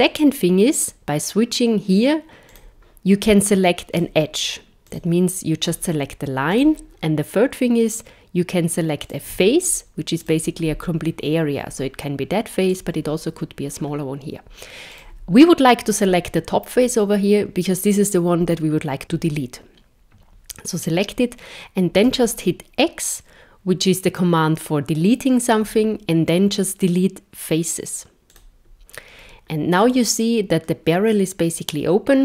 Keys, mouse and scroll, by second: 2.5 click, 3.9 click, 4.8 click, 5.7 click, 6.5 click, 9.0 click, 10.2 click, 12.7 click, 14.9 click, 22.1 x, 29.8 middle click.